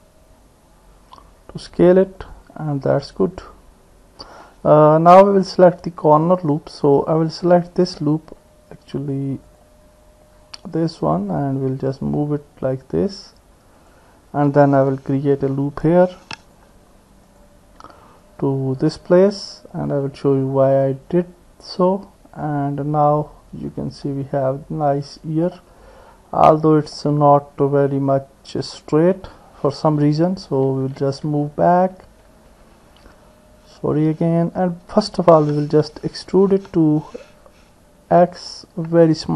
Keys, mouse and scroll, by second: 2.8 middle click, 2.9 click, 3.2 middle click, 3.6 click, 4.5 middle click, 7.6 alt+click, 9.5 click, 10.8 alt+click, 12.0-14.0 drag, 15.9 ctrl+r, 18.0-19.8 drag, 19.8 middle click, 21.2 middle click, 21.4-23.4 drag, 24.1 middle click, 24.3-25.5 drag, 25.5 middle click, 27.0-29.0 drag, 30.5 ctrl+z, 30.8 ctrl+z, 31.0 ctrl+z, 31.3 ctrl+z, 31.7 ctrl+z, 32.0 ctrl+z, 32.3 ctrl+z, 32.6 ctrl+z, 32.8 ctrl+z, 33.1 ctrl+z, 33.7 ctrl+z, 36.6 e.